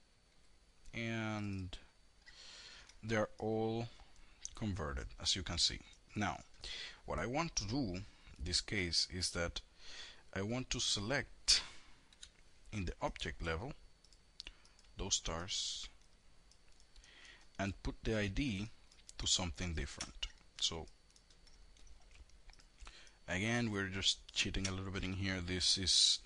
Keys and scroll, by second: 11.6 5.